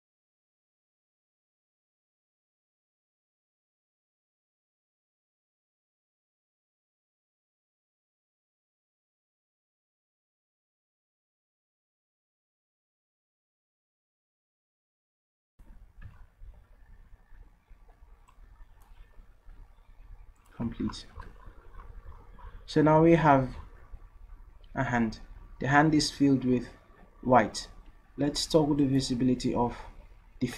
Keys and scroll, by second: 1.2 ctrl+z, 12.0 ctrl+z.